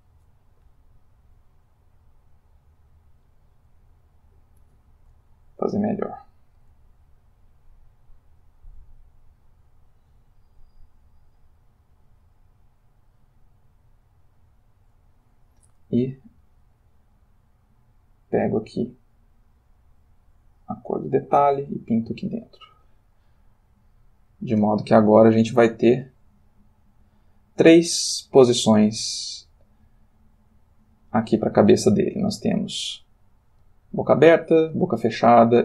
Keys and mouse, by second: 3.4 middle click, 4.7 ctrl+z, 5.9-6.9 ctrl+middle drag, 7.8-15.2 drag, 16.7 click, 18.0 click, 19.5 click, 21.7 click, 22.8-24.4 ctrl+middle drag, 26.9 click, 28.9-30.7 ctrl+middle drag, 30.7 ctrl+click, 32.4 Left, 33.5 Left, 34.9 Right.